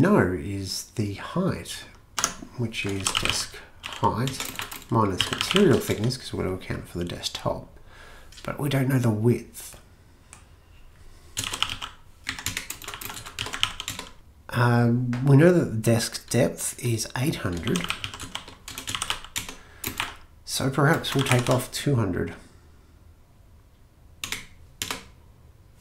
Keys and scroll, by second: 2.2 Tab, 2.7-6.4 typing, 4.3 Return, 11.3-14.4 typing, 12.3 Down, 12.5 Return, 17.4-22.0 typing, 24.3 Return, 24.8 Return.